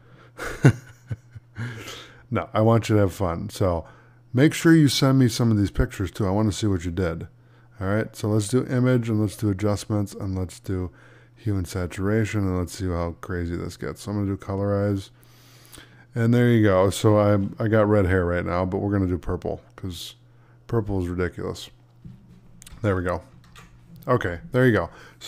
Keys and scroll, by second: 23.3 ctrl+d.